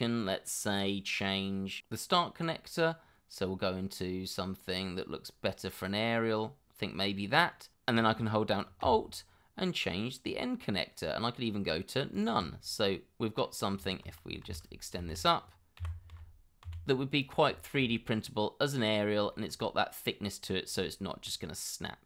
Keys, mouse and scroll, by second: 2.4 scroll up 1, 10.1 alt+scroll down 1, 12.1 alt+click, 12.6 scroll down 1, 12.9 middle click, 13.8 Tab, 14.4 shift+z, 15.8 g, 16.6 z, 17.6 shift+middle click, 18.6 scroll down 1, 19.3 shift+middle click, 20.0 scroll up 1, 20.8 shift+middle click.